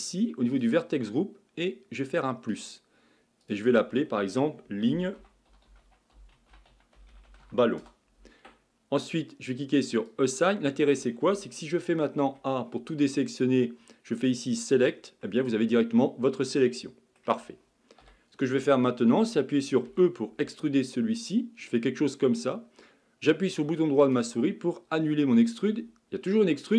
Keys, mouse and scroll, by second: 0.5 click, 2.5-3.5 drag, 3.6-6.8 drag, 10.1-12.2 drag, 12.2 a, 14.6 click, 15.3-18.0 middle drag, 18.0 KP_1, 19.9 e.